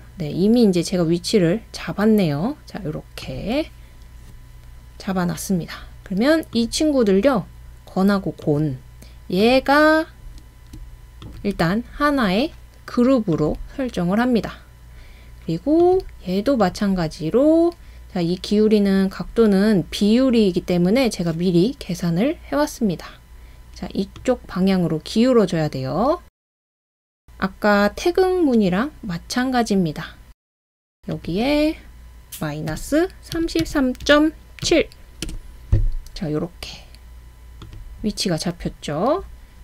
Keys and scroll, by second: 32.7-34.7 typing, 35.3 Return.